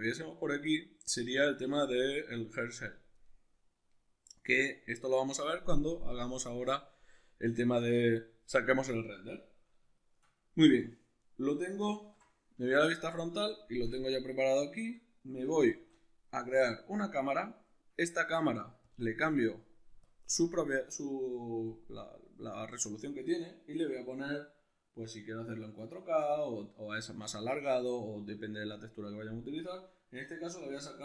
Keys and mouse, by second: 1.1-1.8 drag, 1.8-18.8 middle drag, 11.9 alt+q, 15.7 shift+a, 18.8 click, 20.0-31.0 shift+drag.